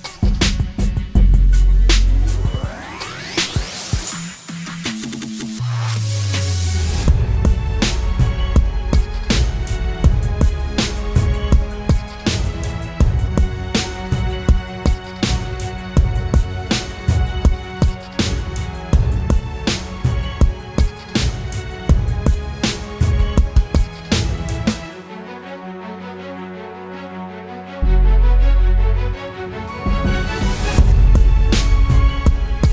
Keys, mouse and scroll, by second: 5.2 Right, 6.1 Up, 7.5 ctrl+click, 7.8 right click, 12.2 double click.